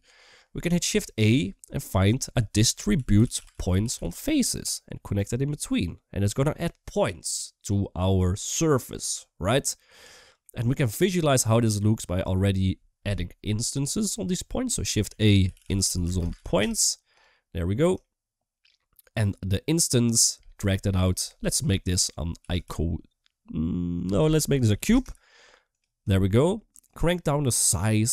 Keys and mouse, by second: 0.7 shift+a, 10.3 middle click, 10.7-11.3 drag, 14.8 shift+a, 18.0 shift+middle click, 19.9 click, 20.1-25.5 drag, 26.0 shift+middle click, 26.6 shift+click.